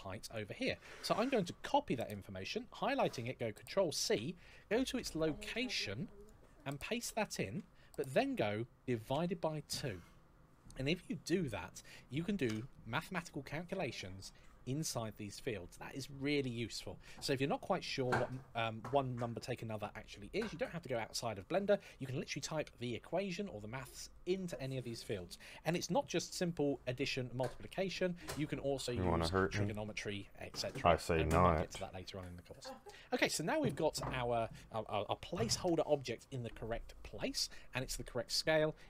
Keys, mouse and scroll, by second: 3.8 ctrl+c, 7.0 click, 7.2 ctrl+v, 8.9 KP_Divide, 9.6 KP_2, 12.3 Return.